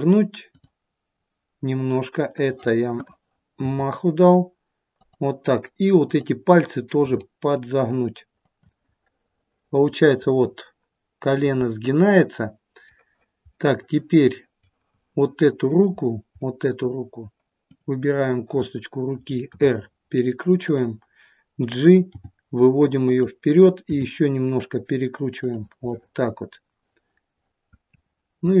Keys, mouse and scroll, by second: 3.5 r, 6.0 click, 6.9 r, 8.9 middle click, 10.3-11.6 scroll down 1, 12.8 middle click, 12.8-13.4 scroll down 1, 13.5 middle click, 14.9 middle click, 15.9-17.5 scroll up 3, 16.3 middle click, 17.5 click, 19.4 r, 22.1 g, 23.8 r, 25.8 middle click, 28.0-28.6 scroll up 2.